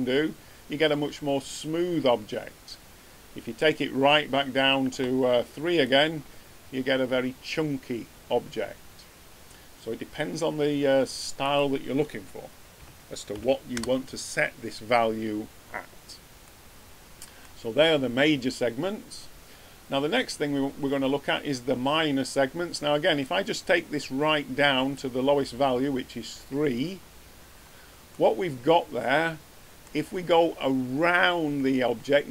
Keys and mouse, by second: 3.6-5.4 drag, 11.4-13.2 drag, 16.6-17.2 middle drag, 28.4 middle drag.